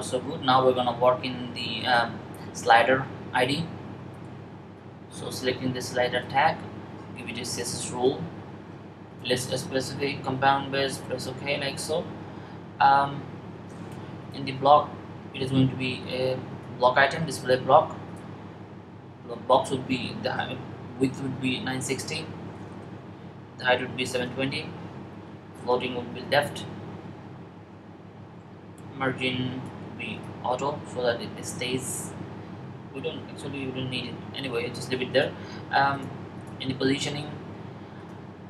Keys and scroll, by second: 20.7-22.1 typing, 26.3 typing.